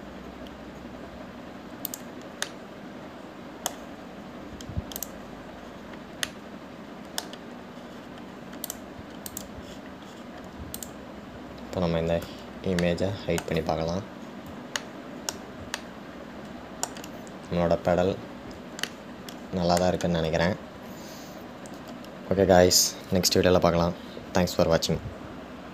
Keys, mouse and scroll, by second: 3.6-6.2 middle drag, 6.2 click, 6.9-7.5 scroll down 2, 7.5-9.0 middle drag, 9.0-9.8 scroll down 5, 9.8 click, 10.5 click, 11.0-12.0 scroll down 10, 12.0 click, 14.0-15.5 middle drag, 15.5 scroll down 1, 16.0-19.0 shift+middle drag, 19.0-20.1 scroll up 2, 20.1-23.1 shift+middle drag.